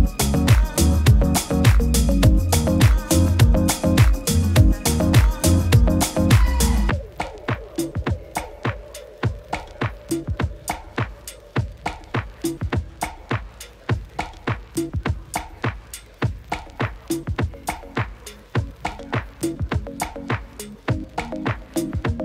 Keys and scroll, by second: 6.9 super+-, 7.3 shift+super+i, 7.6 alt+super+z, 7.9 alt+super+z, 8.4 super+z, 9.0 super+z, 9.4 alt+super+i, 9.9 super+d, 16.2 super+d, 16.8 super+-, 16.9 super+-, 17.0 super+-.